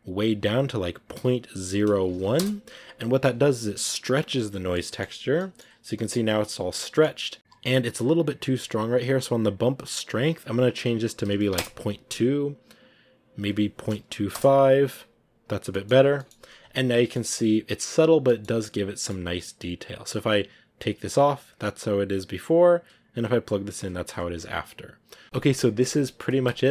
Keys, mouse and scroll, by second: 4.6 middle click, 5.0 scroll up 1, 5.6 scroll up 3, 5.8 middle click, 6.2-7.4 scroll down 1, 8.7 scroll down 1, 11.4-15.6 drag, 15.6 middle click, 16.3-16.8 scroll up 3, 16.5 a, 17.0 middle click, 17.7-18.6 scroll up 1, 18.6 scroll up 1, 18.7 middle click, 18.7 scroll down 1, 18.8-20.9 middle drag, 20.9 click, 22.4 click, 24.8 click, 25.2-26.7 middle drag.